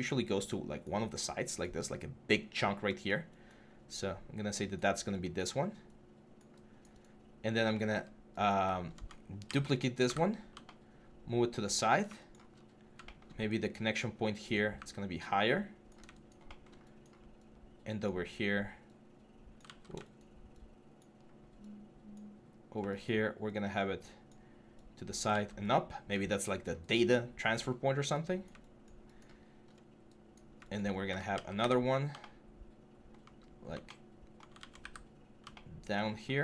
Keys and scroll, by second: 9.3 ctrl+d, 14.6 w, 19.5 ctrl+z, 21.0 ctrl+z, 25.1 ctrl+z, 31.1 ctrl+d, 34.4 ctrl+z.